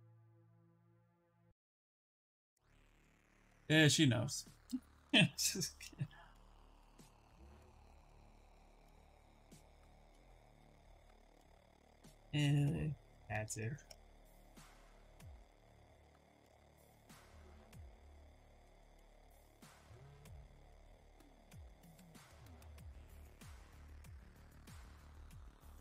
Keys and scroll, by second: 5.7 shift+f, 6.1 shift+f, 7.9 shift+f, 8.2 shift+f, 11.0 shift+f, 14.3 w, 25.0 q.